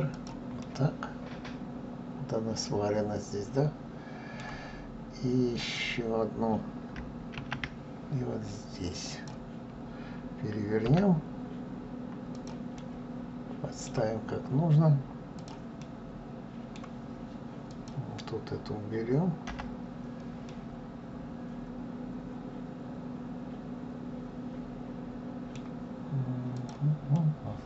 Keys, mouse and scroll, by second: 0.3-3.4 middle drag, 5.3 click, 7.1 shift+d, 12.5-15.1 middle drag, 15.1 click, 15.5-17.4 middle drag, 17.4 click, 19.2 Delete, 20.1-23.2 middle drag, 26.2 click, 26.8-27.6 middle drag.